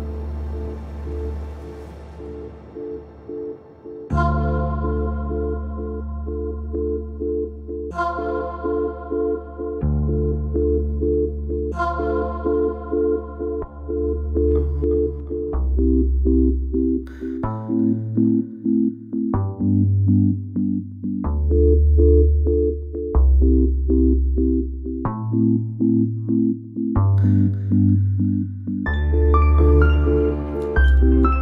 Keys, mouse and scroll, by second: 8.7-9.1 shift+middle drag, 9.1 scroll up 2, 9.6-10.1 shift+middle drag, 10.1 scroll up 2, 10.6-11.8 shift+middle drag, 11.8 s, 13.1 click, 14.0 scroll down 1, 14.7-15.1 shift+middle drag, 15.1 scroll up 1, 15.8 click, 17.8 ctrl+g, 19.0-21.0 drag, 21.0 s, 24.7-25.3 drag, 25.3-25.9 shift+middle drag, 25.9-26.2 scroll down 1, 26.2-27.4 shift+middle drag, 27.4 click, 28.8 click, 29.7-31.4 shift+middle drag.